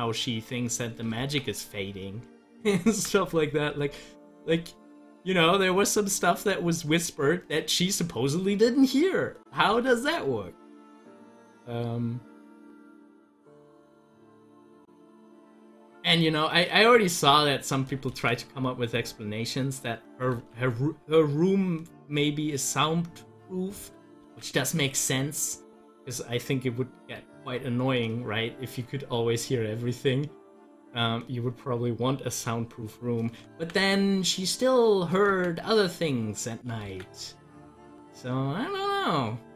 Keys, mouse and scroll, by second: 1.2 ctrl+z, 2.9 ctrl+z, 9.8 ctrl+z, 17.2 click, 20.4 ctrl+z, 24.2 ctrl+z, 25.8 z, 26.3-29.9 drag, 31.8-33.6 drag, 33.6 ctrl+z, 35.3 z, 35.9 click, 36.9 ctrl+z.